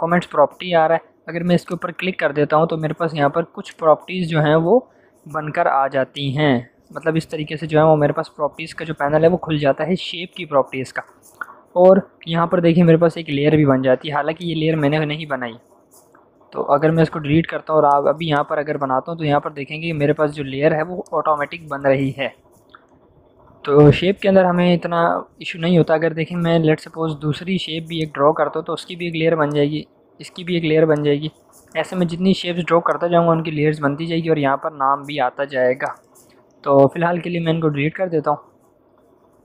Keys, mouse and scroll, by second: 1.6-10.0 drag, 4.0-4.9 click, 10.8 click, 14.3-15.9 drag, 20.9-22.2 drag, 23.5 v, 27.4 u, 27.9 click, 35.6 click, 35.8 shift+click, 39.1 v.